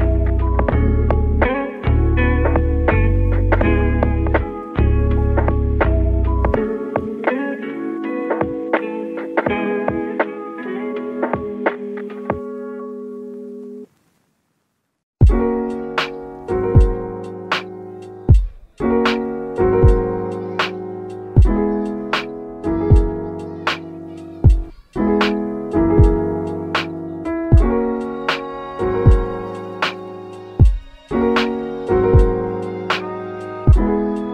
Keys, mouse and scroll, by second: 0.9 i, 2.3-3.4 middle drag, 3.4 2, 3.8 alt+click, 4.7 g, 7.2-7.6 scroll down 2, 7.6-7.9 middle drag, 7.9-8.3 scroll down 2, 8.3-9.6 middle drag, 9.6-10.2 scroll up 1, 10.2 click, 10.9 KP_Decimal, 11.5-11.8 scroll down 4, 11.8 middle click, 12.3 scroll down 3, 12.5 3, 12.7 click, 13.0-14.1 scroll down 2, 14.1 i, 14.9 i, 16.7 2, 17.1 alt+click, 17.6-18.1 middle drag, 18.1 g, 20.5-21.5 scroll down 12, 21.1 Tab, 21.5-21.9 middle drag, 21.9-22.2 scroll down 2, 22.2-22.7 shift+middle drag, 22.7 scroll down 2, 23.1-24.8 middle drag, 24.8 click, 25.3 scroll down 1, 26.5-28.2 middle drag, 28.2 scroll down 1, 28.4 middle drag, 28.6 click, 28.9-31.5 middle drag, 31.5 KP_1, 32.2 a, 32.7 g.